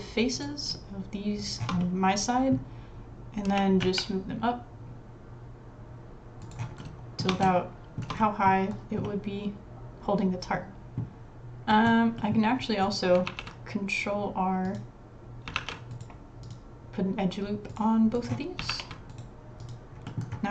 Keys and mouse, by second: 0.4 click, 1.8 middle click, 3.5 g, 6.8 shift+middle click, 7.6 shift+middle click, 8.2 click, 8.3 middle click, 9.0-11.0 middle drag, 11.7 middle click, 12.2 middle click, 12.9 click, 13.3 ctrl+r, 15.5 ctrl+r, 15.9 typing, 18.7 ctrl+r, 20.1 click.